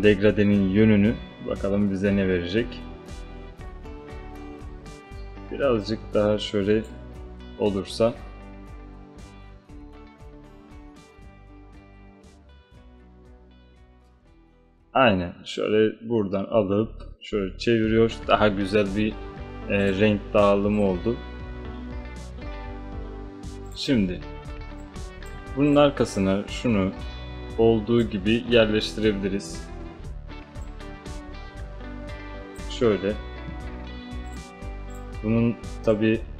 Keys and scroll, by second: 24.7 space.